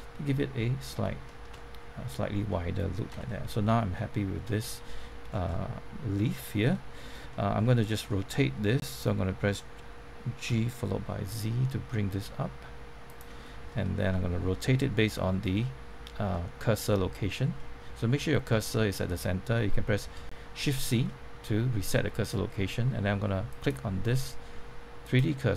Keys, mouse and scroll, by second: 1.2-3.1 shift+middle drag, 3.1 Tab, 3.2-5.3 middle drag, 5.3 scroll down 1, 5.4 middle click, 6.9 scroll up 1, 7.3 shift+middle click, 10.4-11.0 typing, 13.0 click, 13.7-14.9 shift+middle drag, 17.5 shift+middle click, 18.6 shift+middle click, 20.0 shift+c, 20.5 scroll up 1, 21.0 shift+middle click, 23.4 click.